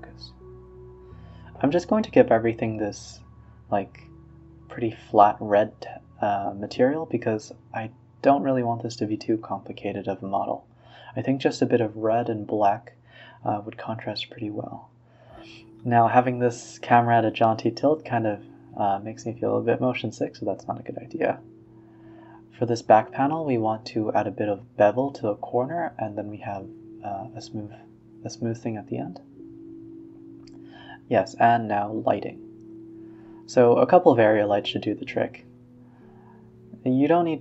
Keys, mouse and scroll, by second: 1.3 click, 1.5 click, 2.2-3.0 drag, 3.6-4.9 drag, 5.5-6.6 drag, 7.0 click, 7.7-9.2 drag, 9.2 a, 9.3 a, 9.8-10.8 scroll down 3, 10.8 click, 11.0 g, 11.6 click, 12.0-14.6 middle drag, 14.6 ctrl+alt+KP_0, 15.2 g, 15.5 r, 16.2 g, 17.0 click, 17.2 Tab, 17.5 middle click, 17.7-18.1 scroll down 5, 18.1 Tab, 18.6 Tab, 19.3 click, 19.6 e, 20.4 click, 21.1 ctrl+b, 22.3-24.1 right drag, 24.1 click, 24.2 Tab, 24.4-25.2 right drag, 25.2-25.6 middle drag, 25.6 KP_0, 26.0 a, 26.2 z, 26.9 click, 27.0 g, 28.0 click, 28.8 KP_7, 29.3 g, 29.6 r, 30.4 middle click, 30.7-33.3 typing, 31.0 middle click, 32.3 middle click, 34.3-34.7 scroll up 3, 34.7 KP_0, 35.1 g.